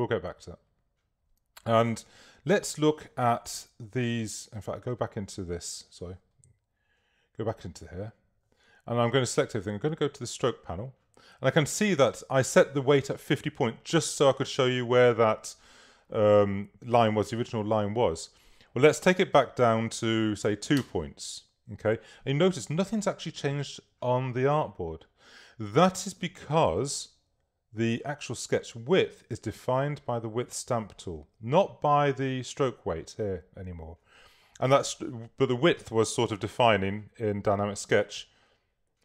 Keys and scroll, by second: 7.9 super+a, 20.5 2, 20.8 Page_Up, 37.0 k.